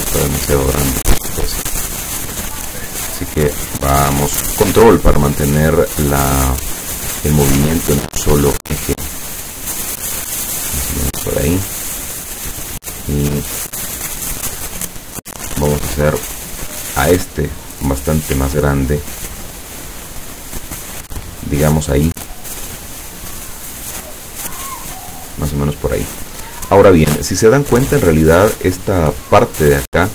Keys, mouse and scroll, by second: 1.8-3.0 drag, 5.2-6.6 ctrl+drag, 7.8 shift+click, 9.2-11.6 ctrl+drag, 15.4 click, 16.1-16.8 drag, 18.4-23.7 ctrl+drag, 29.5 click.